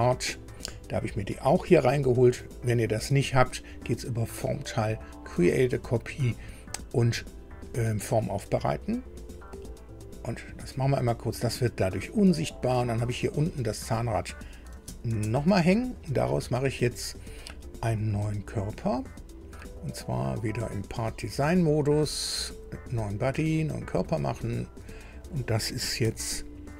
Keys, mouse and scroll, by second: 3.8 click, 10.0 click, 12.0-12.7 scroll down 2, 13.5 click, 14.7 space, 15.1 space, 20.4 click, 21.3 click, 22.7 click, 25.2 click, 26.0 F2.